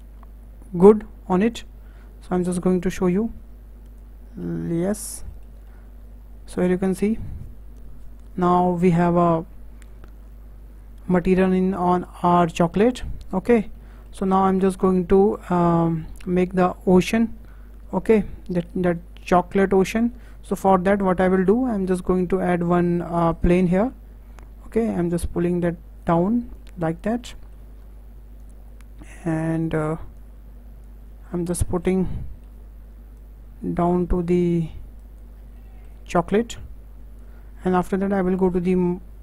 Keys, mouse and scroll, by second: 1.4 click, 2.8-5.3 drag, 5.3-6.7 shift+middle drag, 6.7-7.0 scroll down 3, 7.0-10.0 shift+middle drag, 11.2-11.8 scroll up 5, 11.8-15.6 shift+middle drag, 15.6 click, 16.2 scroll down 2, 16.5-21.5 shift+middle drag, 22.2 shift+a, 24.0-24.8 scroll down 2, 24.8 click, 26.5 click, 27.2 middle click, 27.7-28.4 scroll up 2, 28.4 click, 30.1 click, 31.1 scroll down 2, 31.3-33.2 middle drag, 33.2 click, 33.8-35.0 middle drag, 35.0 click, 35.3 scroll down 3, 35.6 middle click, 36.4 click, 38.5 click.